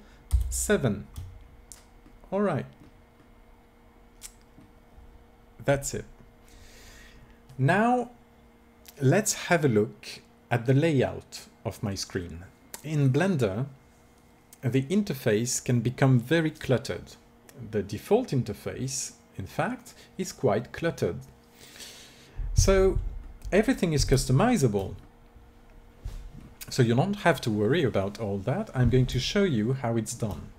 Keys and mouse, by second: 0.2 ctrl+KP_7.